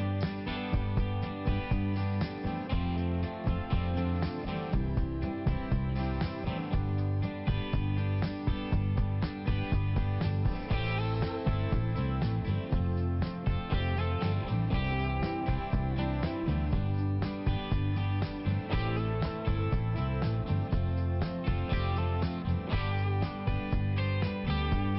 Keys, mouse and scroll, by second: 0.4 click, 2.0 click, 3.2 click, 3.4 click, 3.8 click, 4.2 click, 4.3 click, 4.6 click, 4.7 double click, 5.3 double click, 5.6 double click, 5.7 double click, 7.0 click, 7.1 click, 7.4 click, 7.5 double click, 7.7 double click, 7.9 double click, 8.1 double click, 8.2 double click, 8.4 double click, 8.9 click, 9.1 click, 9.3 click, 9.5 double click, 9.7 double click, 9.9 double click, 10.1 double click, 10.2 double click, 10.4 double click, 10.6 double click, 10.7 double click, 10.9 double click, 11.0 double click, 11.4 click, 11.6 click, 11.8 click, 12.2 click, 12.3 click, 12.6 click, 12.7 double click, 12.9 double click, 13.0 double click, 13.4 double click, 14.9 click, 15.0 click, 15.2 click, 15.7 click, 16.0 click, 16.4 click, 16.7 click, 17.2 click, 17.9 click, 18.1 click, 18.3 click, 18.6 click, 19.2 click, 19.4 click, 19.7 click, 19.8 double click, 19.9 double click, 20.1 double click, 20.4 double click, 20.5 double click, 20.6 double click, 20.8 double click, 21.2 double click, 21.3 double click, 21.6 click, 21.7 click, 21.9 click, 22.3 click, 22.4 click, 22.6 click, 22.8 double click, 23.1 double click.